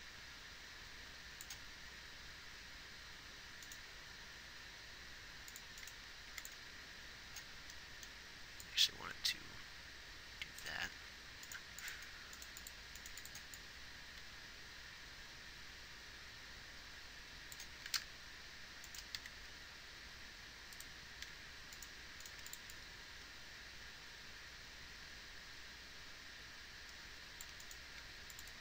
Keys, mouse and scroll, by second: 2.0 g, 4.5 g, 6.3 x, 12.0 x, 12.5 x, 19.2 r, 22.4 x, 27.9 g.